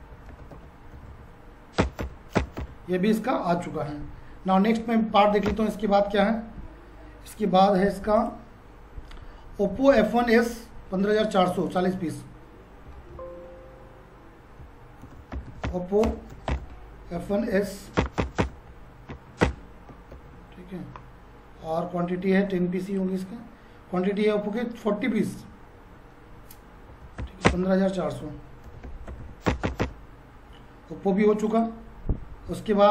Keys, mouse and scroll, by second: 3.9 F4, 5.5 Return, 8.2 click, 11.7 click, 14.7-17.5 typing, 18.0 Return, 19.0 Down, 19.4 Return, 20.1 ctrl+a, 22.9 click, 25.2 click, 26.9-29.7 typing, 27.5 Return, 31.5 click.